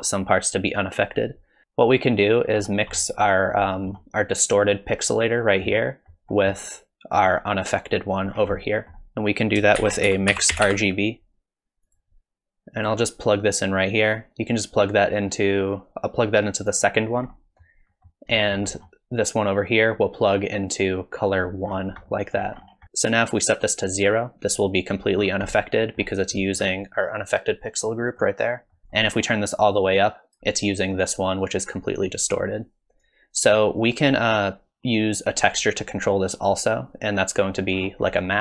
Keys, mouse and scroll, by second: 1.6 middle click, 2.6-3.4 scroll up 5, 3.7 middle click, 5.8 middle click, 8.3-8.9 scroll down 5, 8.6 middle click, 9.3 click, 9.8 shift+a, 15.5 click, 17.3 middle click, 17.9 middle click, 18.5 middle click, 18.8-19.8 scroll down 2, 19.8 click, 21.7-22.2 scroll up 6, 22.2 middle click, 22.6 scroll up 1, 25.2-26.4 scroll down 5, 25.5 middle click, 26.4 middle click, 27.8 middle click, 28.7 middle click, 28.8 middle click, 28.8-29.6 scroll up 3, 29.6 click, 33.0 click, 35.2 click, 37.7-38.4 scroll down 7, 38.1 middle click.